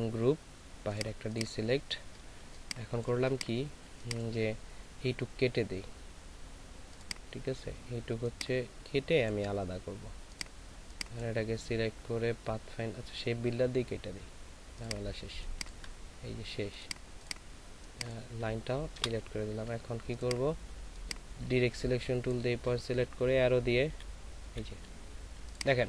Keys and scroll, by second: 2.4 ctrl+space, 3.8 ctrl+space, 19.0 Delete, 23.2 Left, 24.4 Left.